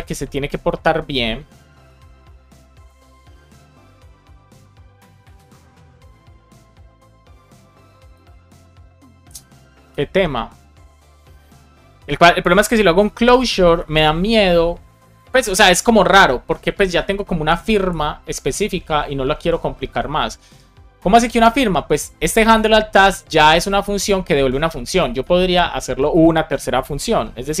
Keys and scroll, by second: 12.5-13.4 typing, 13.7 Left, 15.8 super+z, 26.9-27.6 typing.